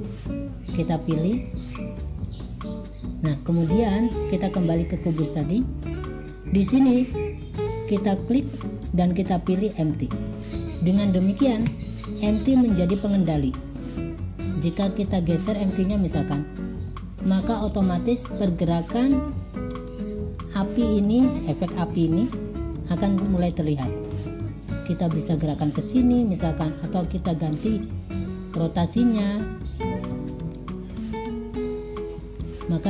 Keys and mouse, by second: 5.3 click, 8.7-10.4 drag, 12.4 click, 15.1 click, 15.9-18.7 drag, 20.0-26.0 drag, 27.6 click, 28.7-30.6 drag, 31.2-32.5 drag.